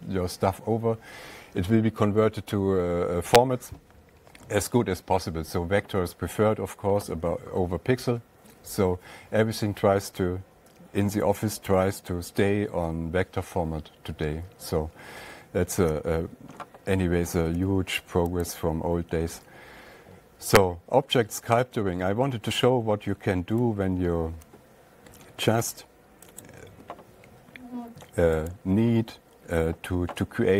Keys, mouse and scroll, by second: 15.7 alt+Tab, 17.8 alt+Tab, 18.9 click, 24.1 alt+Tab, 26.9 click, 29.0 click.